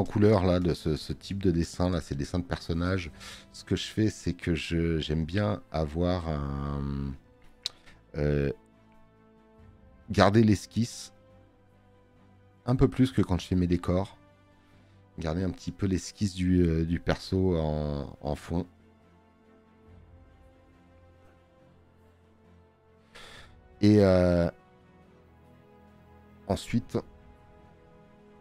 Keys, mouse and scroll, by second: 4.6 space, 4.6 click, 15.6 space, 15.8 click, 22.4 space.